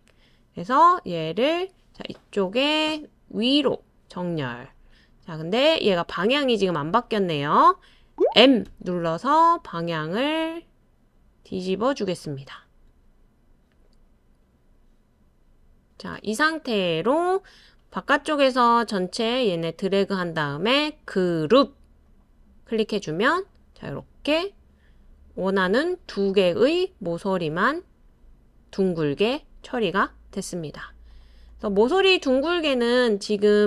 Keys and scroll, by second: 8.6 typing.